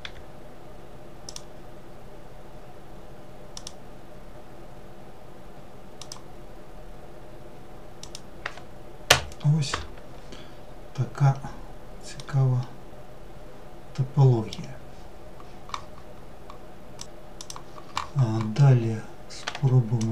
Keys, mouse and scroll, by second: 10.1 scroll down 2, 11.8-14.8 middle drag, 19.3-20.1 drag.